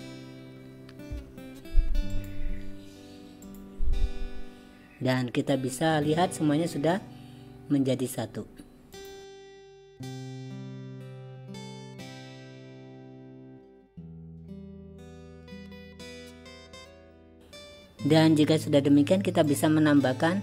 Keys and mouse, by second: 2.2 click, 3.5 click, 9.1 click, 9.6 click, 10.1-10.6 drag, 10.8 click, 12.0 click, 13.9 click, 15.1 click, 15.4 click, 16.7-17.4 drag, 19.5-20.4 drag.